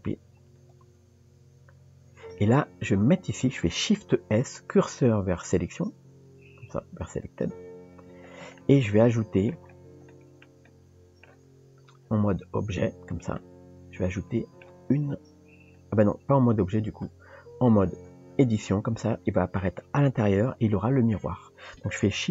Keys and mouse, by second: 0.6 drag, 4.3 shift+s, 8.6 middle click, 10.1 shift+middle click, 10.7 middle click, 11.4 Tab, 13.4-14.7 middle drag, 17.1 Tab.